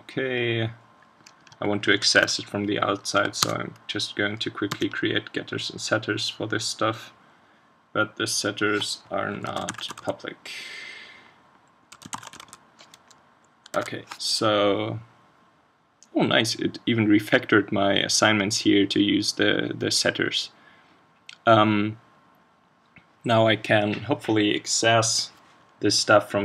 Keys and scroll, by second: 2.2 super+1, 13.7 super+s.